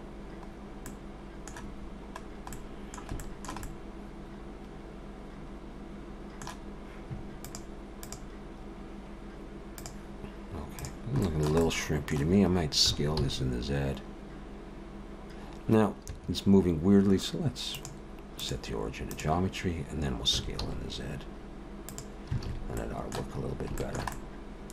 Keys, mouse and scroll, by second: 0.5-1.1 scroll up 2, 0.9 middle click, 1.8-2.5 scroll down 5, 2.5 middle click, 3.2 shift+middle click, 3.6 middle click, 10.8 click, 11.2 shift+middle click, 11.6 middle click, 12.9 s, 17.8 click, 20.4 s, 22.5 alt+a, 22.8 middle click, 23.4-23.8 scroll up 3, 23.8 shift+middle click, 24.1 middle click.